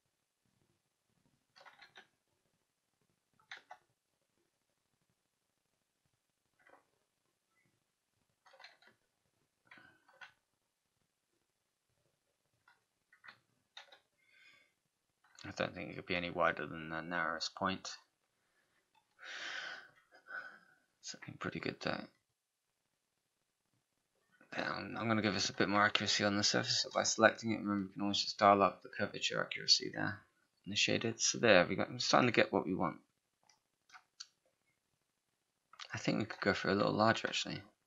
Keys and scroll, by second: 13.1 z, 26.8 ctrl+a.